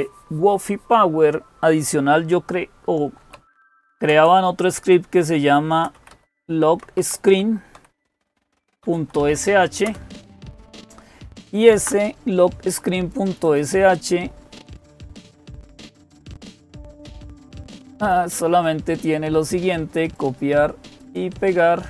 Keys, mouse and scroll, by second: 2.8-4.2 typing, 5.3-9.3 typing, 9.7 Return, 13.0-18.9 drag, 18.7-19.8 right drag, 19.8-21.6 drag, 21.1 right click.